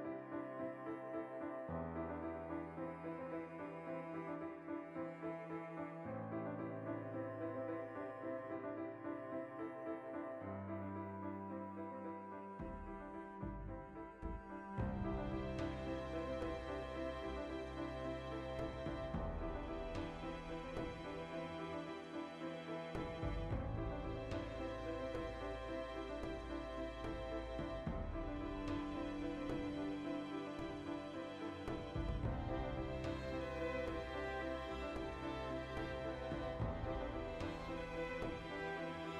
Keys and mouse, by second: 0.7 2, 0.8 right click, 1.0 shift+middle click, 1.5 ctrl+right click, 1.6-2.6 shift+middle drag, 2.6 shift+right click, 2.8-4.0 middle drag, 3.7 ctrl+z, 5.1 click, 6.4 ctrl+r, 7.7 click, 7.8 right click, 8.7 shift+right click, 9.1-9.8 shift+right drag, 9.9-10.2 ctrl+right drag, 10.4 shift+d, 11.1 w, 12.1 shift+middle click, 12.4 right click, 12.8 l, 12.9 middle click, 13.8 alt+q, 15.3-17.2 shift+middle drag, 16.5 e, 17.2 click, 17.3 ctrl+z, 17.8 middle click, 18.2 right click, 19.2 alt+q, 19.6 z, 20.1-27.7 ctrl+shift+middle drag, 20.6 e, 23.3 click, 23.5 alt+q, 24.1 alt+q, 25.7 1, 26.0 b, 26.6 g, 27.7 click, 28.2 ctrl+r, 28.7 right click, 29.1 g, 29.6 click, 29.7 middle click, 30.6 right click, 30.8 middle click, 31.5 alt+right click, 31.9 alt+shift+right click, 32.1-36.4 ctrl+shift+middle drag, 34.5 alt+q, 36.2 g, 36.4 click, 36.4 r, 37.1 click, 37.6 g, 37.7 click, 37.8 g, 38.0 click, 38.1 r, 38.5 click, 38.6-39.1 middle drag.